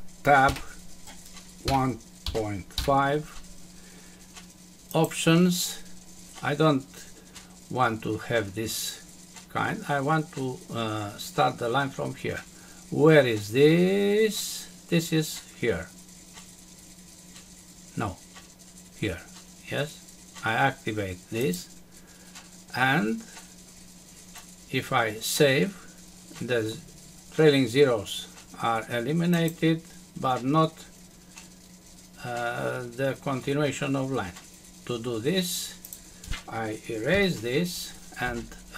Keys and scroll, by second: 0.5 Tab, 37.1 Delete.